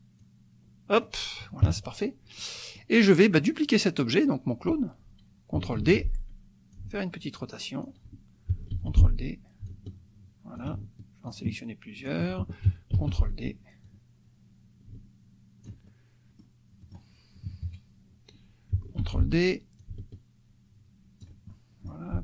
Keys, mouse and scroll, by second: 0.2 click, 1.7 KP_Subtract, 2.4 click, 5.8 ctrl+d, 6.7-8.1 ctrl+drag, 8.8 ctrl+d, 9.7-10.8 ctrl+drag, 11.4 shift+click, 12.1 shift+click, 12.9 ctrl+d, 13.9-15.8 drag, 16.2 click, 16.8 click, 17.5 KP_Subtract, 19.0 ctrl+d, 19.8-21.4 ctrl+drag, 21.5 ctrl+click.